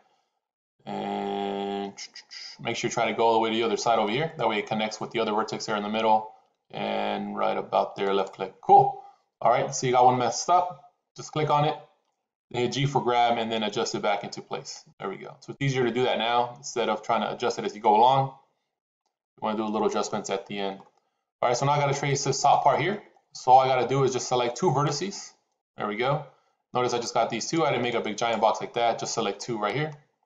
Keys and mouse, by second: 11.2 click, 12.9 g, 19.6 shift+middle click, 24.7 click, 26.8 click, 27.7 click, 29.4 click.